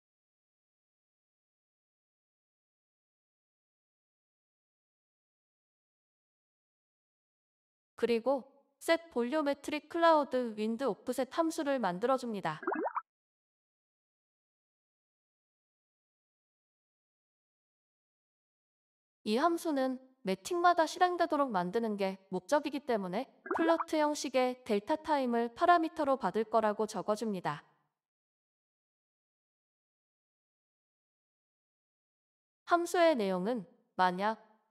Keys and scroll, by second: 23.2-24.3 typing.